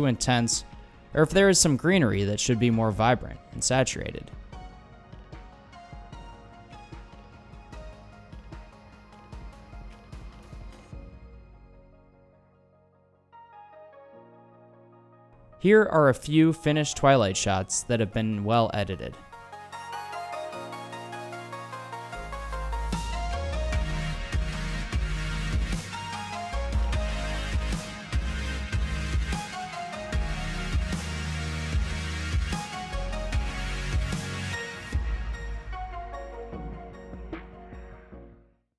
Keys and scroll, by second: 9.8 super+v.